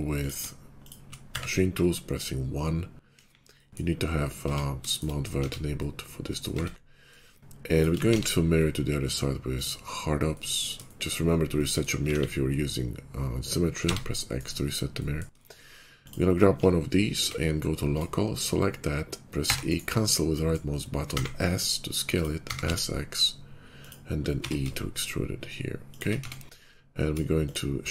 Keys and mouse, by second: 1.2 1, 2.0 /, 3.0 KP_5, 4.3 Tab, 5.3 Tab, 6.5 Tab, 7.9 alt+x, 9.5 click, 9.9-11.5 drag, 11.5-11.8 middle drag, 11.8-14.6 alt+drag, 11.9 alt+x, 15.0-16.0 shift+middle drag, 16.0 click, 16.4-17.1 middle drag, 16.7 /, 17.1 Tab, 17.8 click, 17.9 middle click, 19.3 e, 20.9 s, 22.3 s, 22.6-24.2 drag, 24.2 e, 26.1 Tab, 26.5 /.